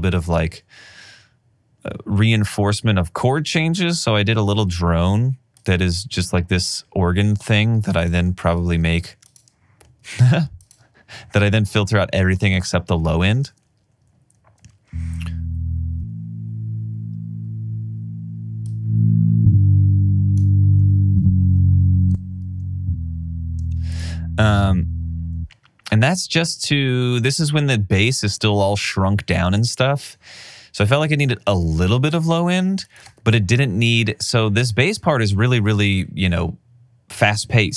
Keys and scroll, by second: 7.8 alt+super+w, 9.2 alt+super+w, 10.5 alt+super+w, 13.3 alt+super+w, 13.9 space, 22.5 super+z, 24.1 space, 27.4 alt+r, 27.5 alt+r, 33.6 t.